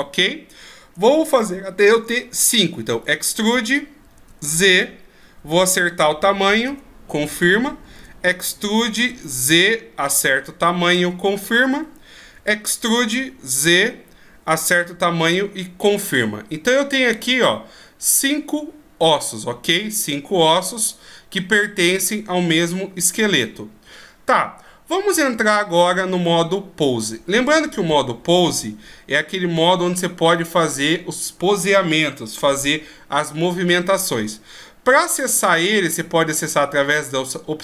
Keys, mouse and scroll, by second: 1.1-1.5 shift+scroll up 1, 2.9 shift+scroll up 7, 2.9 e, 7.9 e, 12.3 e, 16.1 middle click, 35.1 click.